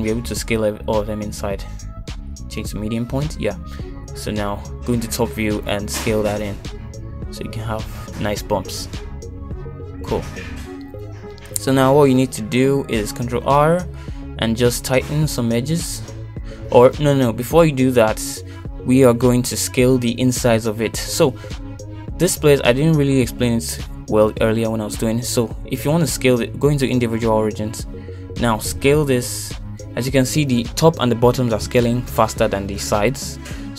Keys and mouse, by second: 1.2 middle click, 6.6 middle click, 7.3 KP_7, 8.6 s, 13.3 middle click, 14.9 shift+z, 15.4 middle click, 18.0 middle click, 20.8 middle click, 21.2 KP_1, 22.0 shift+middle click, 22.4 shift+z, 22.9 middle click, 23.9 middle click, 24.4 shift+middle click, 25.1 middle click, 26.4 s, 27.9 ., 30.6 middle click.